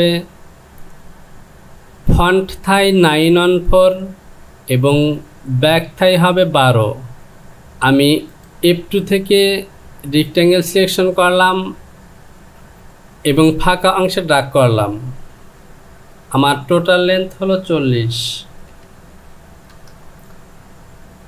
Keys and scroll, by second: 12.7 Home, 16.6 Down.